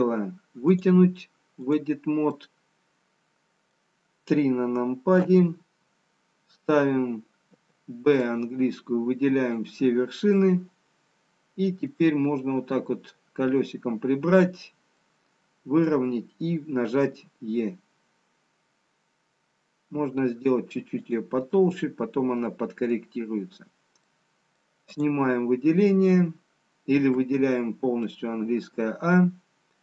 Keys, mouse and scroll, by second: 5.3 KP_3, 7.7 b, 11.1 middle click, 13.4-14.2 scroll down 3, 17.8 middle click, 17.8 e, 21.7 middle click, 24.0-24.8 scroll up 3, 24.8 middle click, 25.7 click, 28.6 middle click, 28.6 a.